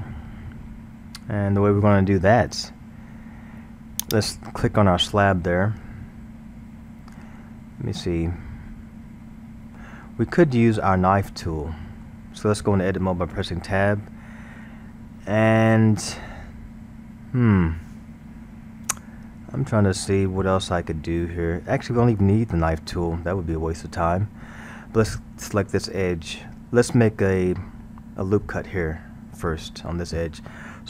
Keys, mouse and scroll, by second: 1.0-4.0 scroll, 4.1 click, 7.4-10.4 middle drag, 13.3 Tab, 15.7 scroll.